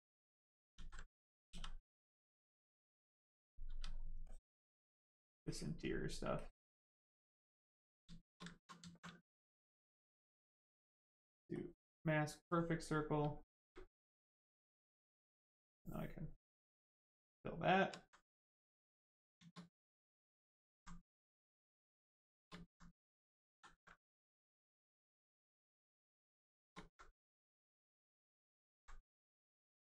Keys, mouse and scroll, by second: 0.7 ctrl+z, 1.0 right click, 1.4 s, 2.2 click, 3.1 right click, 3.6 click, 4.2 click, 4.2 click, 5.7 right click, 6.3 click, 7.8 right click, 8.0 shift+right click, 8.5 alt+right click, 8.7 alt+right click, 8.8 alt+right click, 11.5 ctrl+click, 12.4 ctrl+click, 15.0 right click, 15.1 right click, 16.6 click, 17.4 right click, 17.9 alt+right click, 18.3 ctrl+right click, 18.5 ctrl+click, 18.9 right click, 19.6 alt+right click, 20.9 right click, 21.0 right click, 22.1 shift+right click, 22.5 alt+right click, 22.8 right click, 22.8 right click, 23.4 ctrl+z, 23.9 right click, 24.0 right click, 25.6 ctrl+click, 26.2 right click, 26.2 right click, 26.4 shift+right click, 26.8 alt+right click, 27.9 click, 28.0 click, 28.4 alt+right click, 29.0 click, 29.0 click.